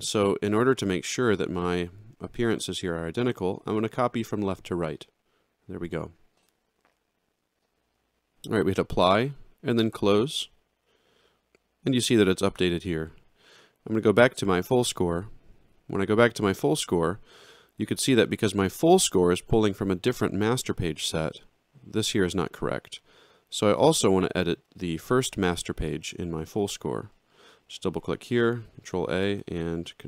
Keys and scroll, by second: 28.2 ctrl+a.